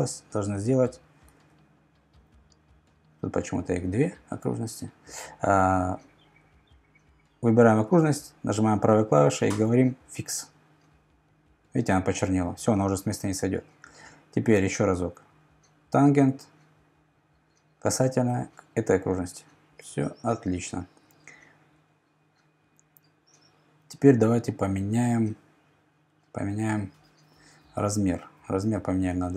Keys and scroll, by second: 1.4 super+z, 3.8 BackSpace, 28.9 Left, 29.1-29.3 typing.